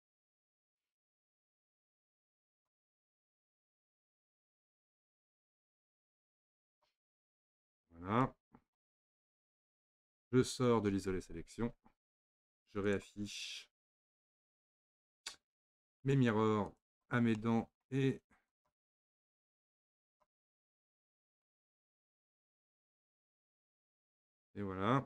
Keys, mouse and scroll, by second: 0.4 click, 3.3-7.2 drag, 7.2-8.0 middle drag, 8.0 scroll down 2, 8.2-9.0 middle drag, 9.0-9.3 scroll up 2, 9.3-11.6 middle drag, 11.6 KP_Divide, 12.9 click, 15.8 click, 16.7 click, 17.4-18.5 middle drag, 18.5 click, 20.1 click, 20.6-21.3 scroll down 2, 21.3 drag, 21.6-24.6 middle drag.